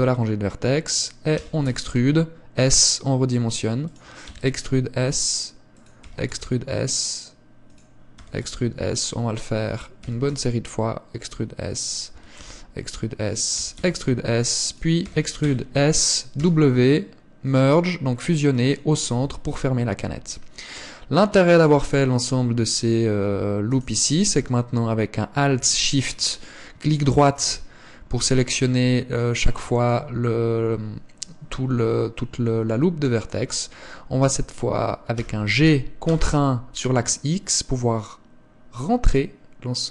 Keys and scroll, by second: 1.6 e, 4.5 e, 6.3 e, 8.4 e, 10.2 e, 12.3 e, 13.7 e, 15.3 e, 16.6 w, 19.4 Tab, 21.9 Tab, 35.3 g.